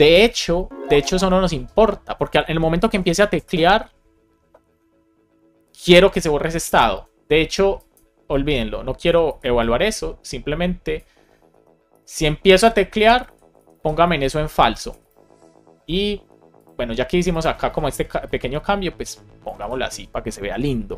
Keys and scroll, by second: 9.1 super+x, 11.4 BackSpace, 13.0 Down, 13.1 super+Right, 13.4 Return, 13.7 super+v, 14.4 Left, 15.2 Up, 17.6 super+c, 19.5 super+v.